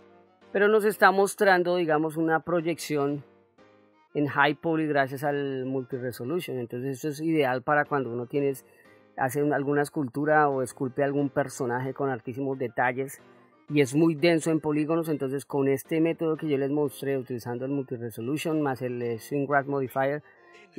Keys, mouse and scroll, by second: 2.9 Tab, 2.9 middle click, 3.7 middle click, 7.7 middle click, 14.8 middle click.